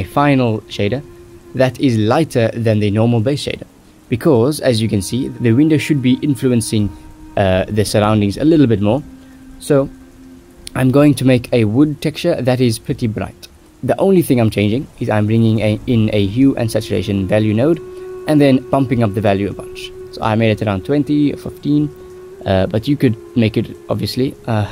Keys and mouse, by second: 2.2 shift+middle click, 3.1 shift+middle click, 3.6 shift+middle click, 4.2 ctrl+s, 5.3 shift+middle click, 6.1 click, 6.2 shift+middle click, 6.6 shift+middle click, 7.2 middle click, 7.6 middle click, 8.0 middle click, 8.2 middle click, 9.2 shift+middle click, 9.6 click, 9.7 Tab, 10.1 3, 11.4 click, 13.1 Tab, 14.8 drag, 15.5 drag, 16.0 ctrl+s, 16.7 click, 17.5 middle click, 17.7 a, 18.2 ctrl+c, 18.8 click, 19.5 a, 20.0 x, 20.4 ctrl+v, 20.7 drag, 21.3 middle click, 22.0 middle click, 22.8 middle click, 23.4 click, 23.8 g, 24.1 click, 24.2 middle click, 24.6 shift+a.